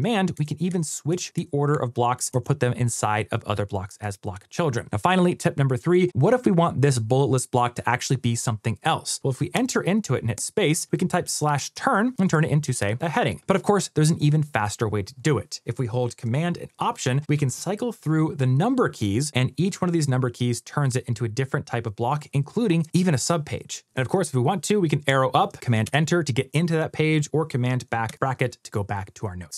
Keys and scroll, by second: 0.2 shift+super+Up, 0.9 shift+super+Down, 1.6 shift+super+Up, 2.3 shift+super+Down, 3.9 shift+super+Down, 17.4 alt+super+1, 17.8 alt+super+2, 18.3 alt+super+3, 18.8 alt+super+4, 19.3 alt+super+5, 19.5 alt+super+6, 19.9 alt+super+7, 20.4 alt+super+8, 21.0 alt+super+9, 25.7 super+Return, 27.9 super+[.